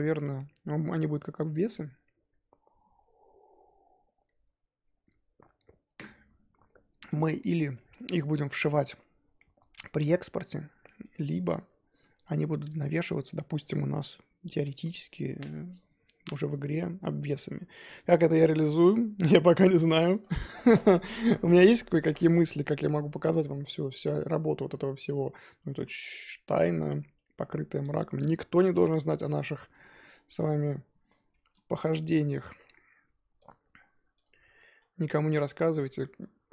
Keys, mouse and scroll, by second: 6.6-7.1 scroll up 2, 7.1 click, 7.7-10.6 middle drag, 10.6-11.0 scroll down 3, 11.0-12.9 middle drag, 12.9-15.2 scroll up 2, 15.2-19.4 scroll up 1, 19.4-23.9 scroll up 1, 23.9 scroll up 1, 24.0-27.5 middle drag, 27.5 scroll up 2, 28.2 click, 28.6 click, 28.9-30.1 shift+middle drag, 30.1 shift+click, 31.0 ctrl+j, 33.4-34.2 right drag, 34.2 click, 34.4 scroll down 1, 34.5-34.9 middle drag, 34.9-35.4 scroll up 2, 35.4 click, 35.9-36.5 middle drag.